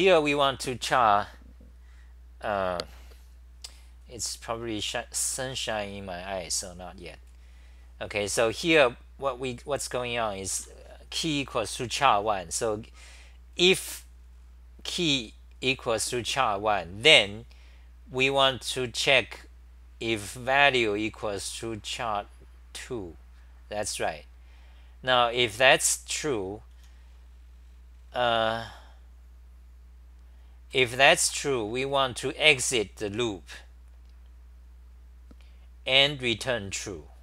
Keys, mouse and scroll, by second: 0.0-0.8 typing, 10.6 ctrl+g, 30.5-31.7 typing.